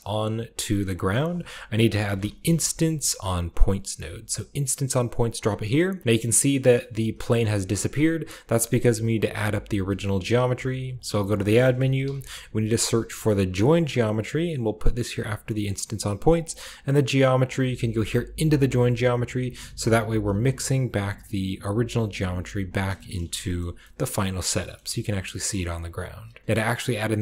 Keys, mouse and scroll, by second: 0.8 click, 1.8-2.5 typing, 4.4 click, 5.1-6.6 drag, 5.9-8.1 scroll down 1, 6.9-7.3 typing, 8.1-9.7 middle drag, 10.3 typing, 10.8 click, 11.5-11.9 typing, 11.8-13.3 shift+drag, 13.5 middle click, 13.5-15.1 drag, 15.1 middle click, 15.1-15.5 drag, 15.5 middle click, 15.7-16.3 drag, 16.3 middle click, 16.4-17.4 drag, 17.4-18.9 middle drag, 18.9 drag, 19.6 click, 19.7-20.2 typing, 20.1-21.1 drag, 21.4-22.1 drag, 22.1-24.5 scroll down 1, 22.8 shift+middle click, 23.0 shift+middle click, 23.2 typing, 23.5 shift+middle click, 23.9-24.5 shift+middle drag, 24.7-25.2 middle drag, 24.7-26.4 scroll up 1, 25.4-27.2 middle drag, 25.8-26.4 drag.